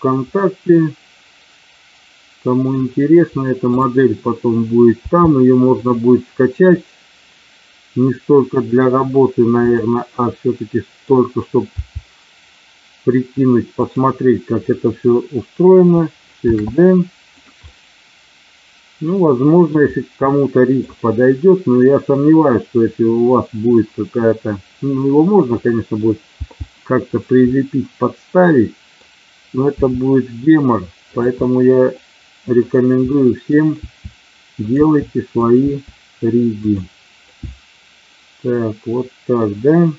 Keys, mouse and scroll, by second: 0.2-2.6 middle drag, 3.6 click, 4.8 g, 5.7 click, 6.8-9.0 middle drag, 9.6 click, 10.1 middle click, 11.9 g, 13.7 click, 16.4 shift+d, 17.3 click, 17.6-19.7 middle drag, 20.2 middle click, 25.7 middle click, 26.2 g, 27.3-29.1 middle drag, 29.7 e, 31.0 click, 31.5-32.6 middle drag, 33.1 middle click, 33.7 e, 34.6 click, 34.7 e, 35.4 click, 35.5 e, 36.5 click, 37.3-39.4 middle drag.